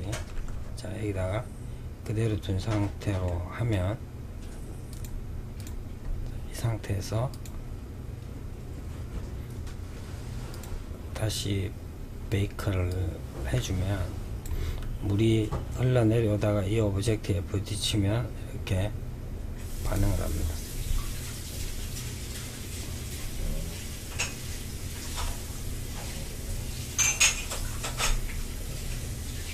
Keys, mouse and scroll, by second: 2.4-4.0 middle drag, 4.0 click, 4.7 click, 6.4 click, 9.6 click, 12.0-15.0 drag, 18.9 click.